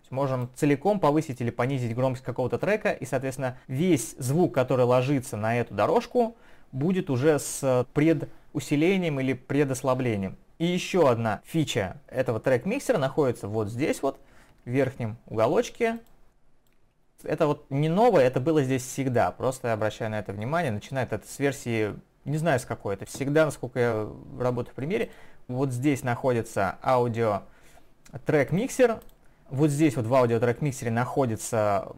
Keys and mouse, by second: 2.6 click, 3.8 click, 14.7 ctrl+1, 16.0 ctrl+click, 23.8 Escape, 25.1 click.